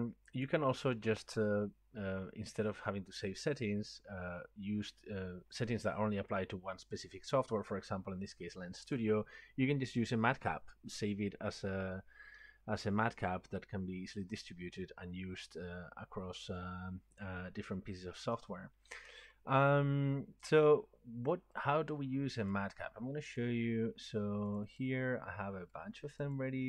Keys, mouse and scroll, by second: 0.0 click, 22.6 click, 24.6 click, 24.8 click, 26.1 click, 26.4 click.